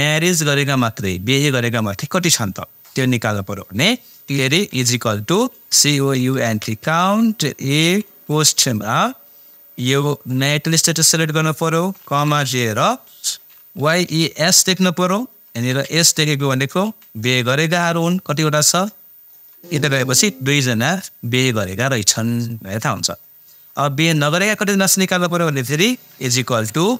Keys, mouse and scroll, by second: 4.7-8.3 typing, 10.3-12.2 drag, 12.2 ,, 13.2-17.7 typing, 25.9 =.